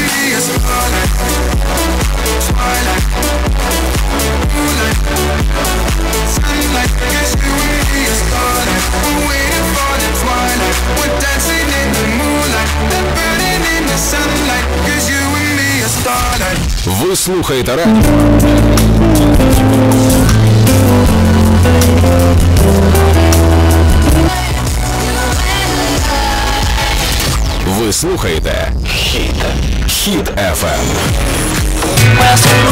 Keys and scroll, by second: 14.3 Page_Down, 24.6 Page_Down.